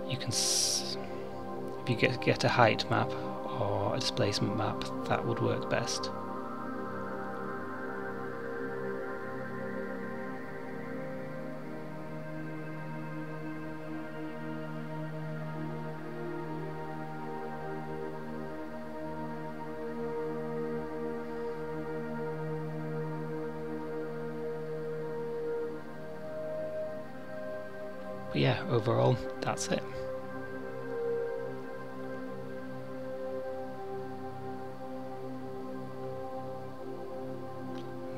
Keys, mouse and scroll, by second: 11.2 click, 23.6 click, 25.0 middle click, 33.9-34.5 scroll up 1, 34.5 middle click.